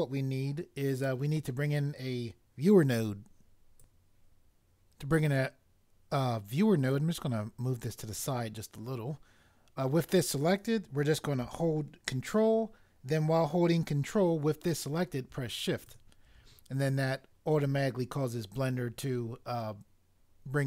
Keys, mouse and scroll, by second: 3.8 click, 6.9 click.